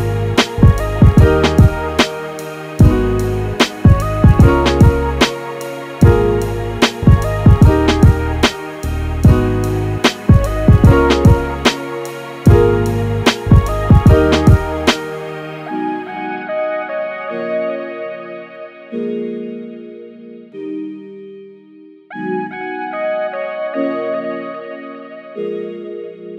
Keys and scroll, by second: 7.1 super+z.